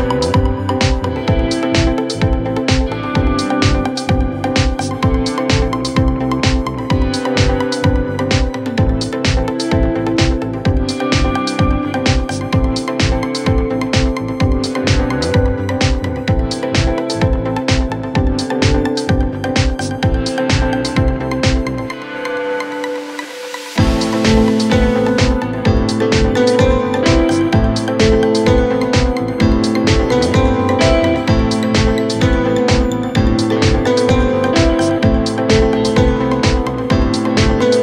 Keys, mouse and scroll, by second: 0.5 scroll down 3, 0.7 scroll up 1, 1.6-2.1 scroll up 4, 2.6 typing, 2.8-3.1 scroll up 7, 3.6 typing, 4.8 typing, 5.7 double click, 6.3 Delete, 6.6-6.9 typing, 7.3 Return, 8.7 scroll down 4, 12.7 scroll down 4, 14.4-14.9 scroll down 8, 16.3-16.9 scroll down 3, 16.9-18.1 scroll down 5, 18.3 space, 18.6 shift+click, 18.8 shift+click, 18.9 right click, 20.8 middle click, 21.1 scroll down 4, 21.3 scroll up 4, 21.4 middle click, 22.6 middle click, 22.9 scroll down 2, 23.3 scroll up 1, 25.9 middle click, 27.9 space, 28.2 space, 30.3 Delete, 30.3 typing, 30.6 Return, 32.4-33.4 scroll down 4, 35.7 middle click, 36.0-36.5 scroll up 6.